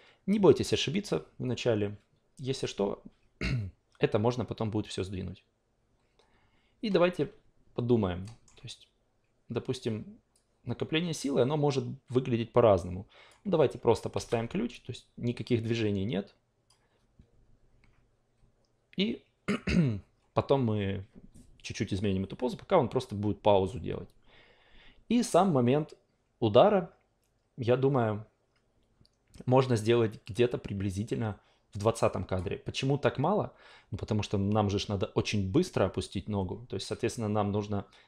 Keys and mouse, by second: 8.2 alt+middle click, 10.3-13.5 drag, 14.1 s, 14.7-16.8 drag, 25.3-32.7 drag.